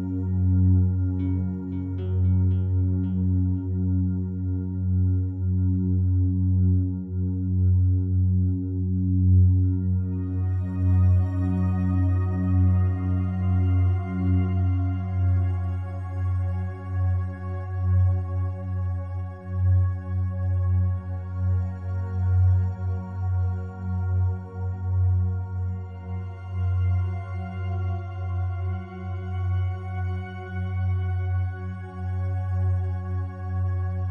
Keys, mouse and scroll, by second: 0.1 click, 0.6-1.2 drag, 1.3-2.0 drag, 2.1 shift+click, 3.3 alt+g, 4.4 alt+shift+click, 5.2 click, 5.5 click, 6.1 click, 7.3 KP_Divide, 8.5 Tab, 9.0 alt+click, 11.4 click, 12.0 alt+click, 13.0-15.4 drag, 13.0 typing, 15.4 middle click, 16.2 click, 16.7 middle click, 16.8 click, 17.4 alt+middle click, 17.6 ctrl+alt+click, 17.8 ctrl+alt+middle click, 18.1-19.1 ctrl+alt+drag, 19.4 click, 20.0 alt+click, 21.4 ctrl+click, 21.7 ctrl+click, 22.7 ctrl+z, 22.8 ctrl+z, 24.1 ctrl+click, 24.6 ctrl+alt+click, 25.9-27.7 ctrl+drag, 28.3 alt+click, 29.6 alt+click, 31.4 shift+middle click, 31.7 alt+shift+click, 32.5 ctrl+z, 33.0 alt+middle click, 33.3 alt+shift+click, 33.9 shift+middle click, 34.0-34.1 shift+drag.